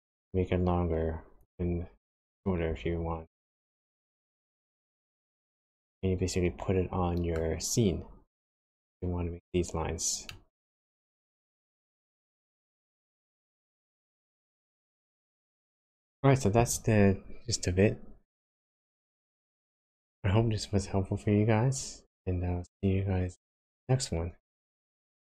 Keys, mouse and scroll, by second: 2.1 s, 5.8 middle click, 10.2 middle click, 12.7-13.3 scroll down 1, 13.5-15.3 scroll down 6, 15.3 middle click, 18.5 middle click, 19.9-21.7 scroll up 1.